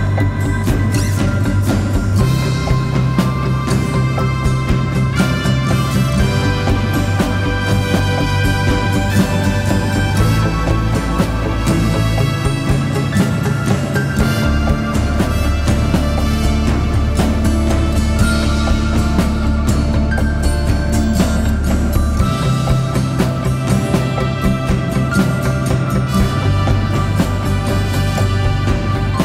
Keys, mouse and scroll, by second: 0.0 alt+s, 1.2 alt+shift+click, 5.6 Left, 5.8 Left, 6.6 Left, 7.3 Right, 8.1 Return, 12.6 right click, 21.3 right click, 21.8 alt+click.